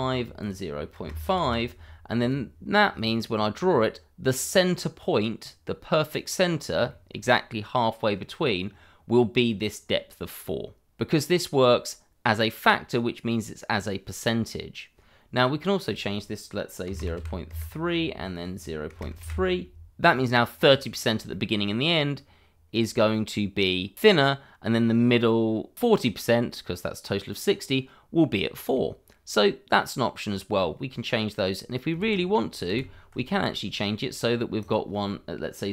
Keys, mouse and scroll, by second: 0.4 click, 1.0 0, 1.0 ., 1.2 5, 1.4 Return, 2.3 click, 6.9 shift+middle click, 13.2-13.9 scroll up 1, 15.8 click, 16.8 0, 16.9 ., 17.1 3, 17.5 Return, 18.3 click, 18.9 0, 19.0 ., 19.2 2, 19.3 Return, 21.0 scroll down 1, 21.3 shift+middle click, 22.1 click, 27.7 scroll up 1, 28.7 middle click, 32.0 ctrl+z, 34.6 click.